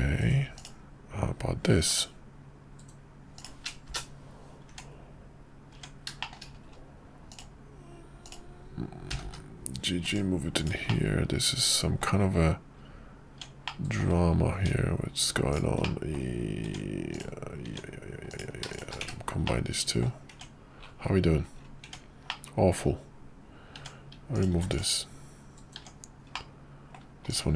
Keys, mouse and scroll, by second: 4.7 Tab, 6.2 shift+middle click, 8.2 click, 9.1 g, 10.5 click, 10.8-12.0 middle drag, 12.8 Tab, 13.6 middle click, 15.8 middle click, 19.1 1, 19.4 middle click, 20.3 Tab, 21.8 Tab, 22.3 middle click, 24.5 x, 25.8 Tab, 26.3 middle click, 27.2 click.